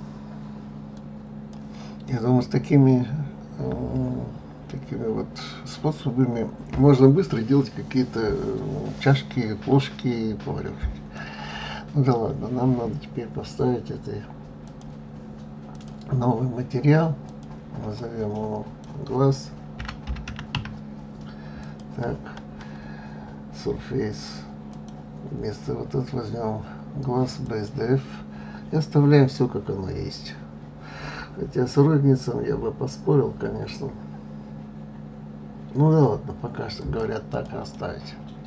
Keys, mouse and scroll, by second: 1.6-4.6 middle drag, 14.2 click, 15.3 click, 16.8-19.8 drag, 24.3-27.3 drag, 36.3 click, 36.9 click, 37.3-38.4 middle drag.